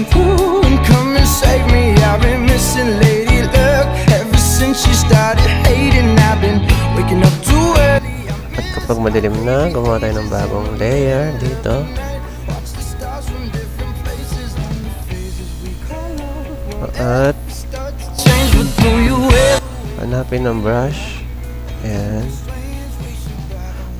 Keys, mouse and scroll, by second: 0.4-2.1 drag, 4.1 z, 4.2 click, 4.8 z, 7.1 click, 7.7 click, 8.8 click, 10.4 click, 10.5 typing, 13.8-14.5 typing, 16.5-17.7 typing, 17.0 click, 22.4 typing.